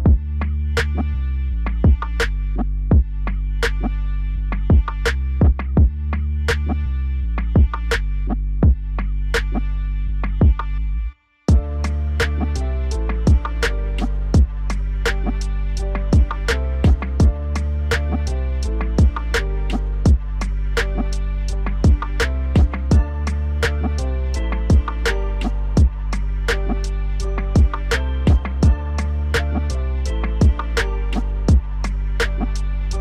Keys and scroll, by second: 10.5 alt+w, 22.3 ctrl+z.